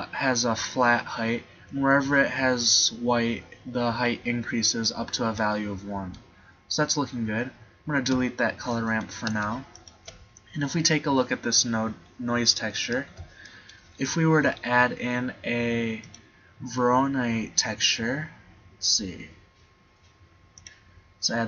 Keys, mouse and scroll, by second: 8.2 x, 13.9 shift+a.